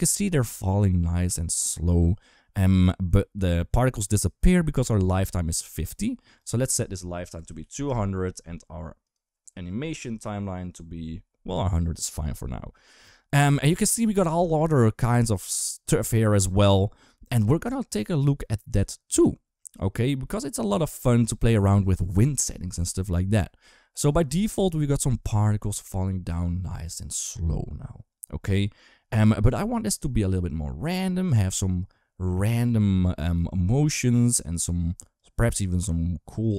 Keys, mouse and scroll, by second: 6.2-7.7 drag, 7.4 0, 8.8-11.3 drag, 32.8 space, 33.2 d, 33.3-34.3 drag, 34.3 d, 34.6 d, 35.0-36.5 drag.